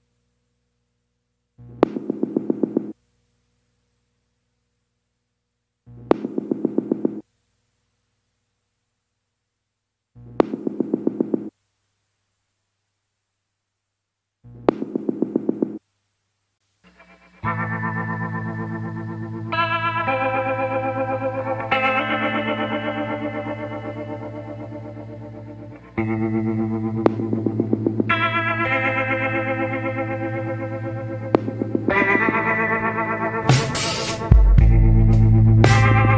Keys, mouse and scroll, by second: 1.1 scroll down 1, 3.7 scroll down 1, 5.4 scroll up 1, 9.6 scroll down 1, 12.1 scroll up 1, 18.6 scroll down 1, 24.7 scroll up 1, 31.8 scroll down 1, 32.5 scroll up 1.